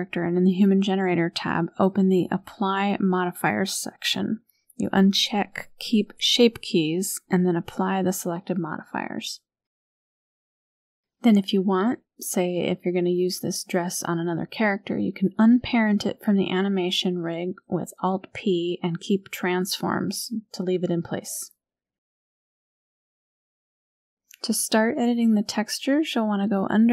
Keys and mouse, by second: 0.6 click, 2.9 click, 3.6 click, 6.8 click, 9.0 click, 10.6 click, 11.6 click, 13.8 click, 17.8 alt+p, 20.9-22.0 drag, 23.9 click.